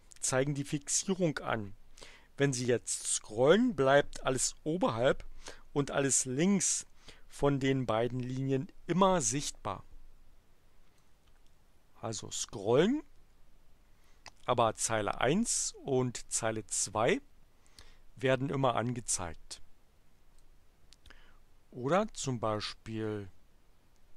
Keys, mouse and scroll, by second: 11.0-20.6 drag, 22.5-24.1 drag.